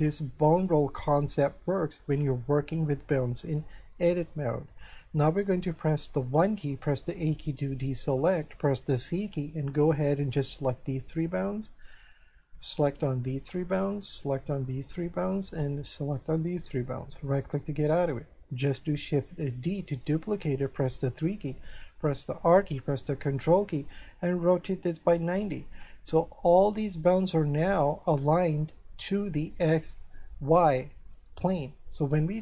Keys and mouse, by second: 3.7 middle click, 5.8 1, 7.0 a, 7.5 shift+middle click, 9.0 c, 10.8 click, 12.6 click, 14.2 click, 16.1 click, 17.4 right click, 19.1 shift+d, 20.0 right click, 21.0 KP_3, 22.3 r, 25.3 ctrl+click, 26.5 middle click.